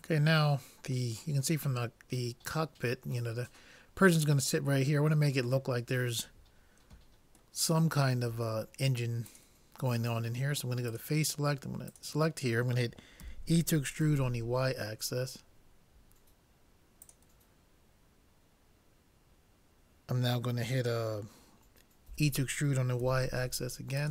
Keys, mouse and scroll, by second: 1.2-3.0 middle drag, 4.9-6.8 middle drag, 7.8-9.3 middle drag, 9.3 right click, 9.4-13.8 drag, 13.3 e, 22.2 e.